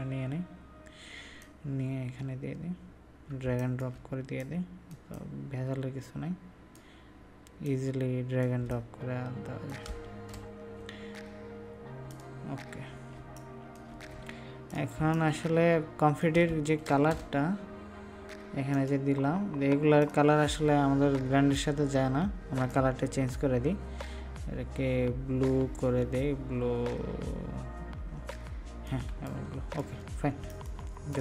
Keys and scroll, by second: 3.4 ctrl+space, 13.1 ctrl+space, 29.0 ctrl+space.